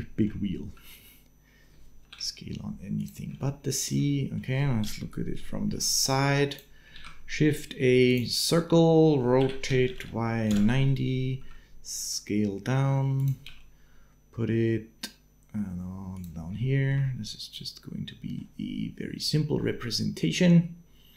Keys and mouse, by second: 3.2 shift+middle click, 3.9 middle click, 4.6 KP_3, 5.2 shift+middle click, 5.4 shift+click, 6.7 shift+a, 9.2 r, 10.3 KP_Decimal, 11.2 s, 13.2 g, 16.4 shift+middle click, 16.8-18.2 middle drag, 19.5-21.0 middle drag.